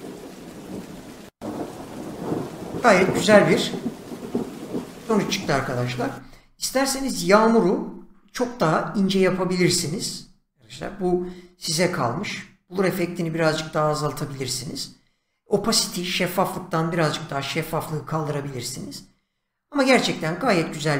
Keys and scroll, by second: 6.2 space.